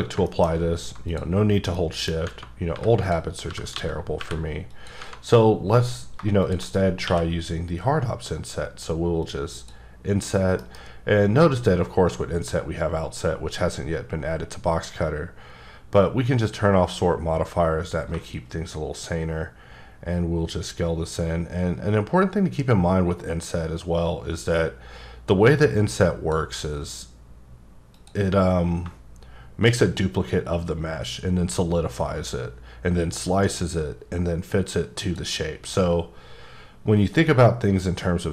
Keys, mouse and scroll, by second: 0.5-0.8 scroll up 2, 1.1 click, 1.8 middle click, 2.7 3, 3.0 click, 3.5 g, 3.7 x, 4.2 y, 4.7 click, 6.4 shift+click, 7.0 q, 9.2 click, 10.6 F9, 16.4 click, 18.6 click.